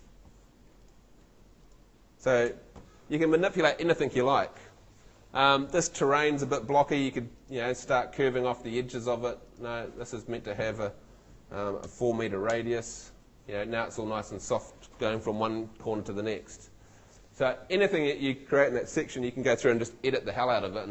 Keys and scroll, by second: 0.0 BackSpace, 2.5 BackSpace, 11.9 4, 12.5 Return.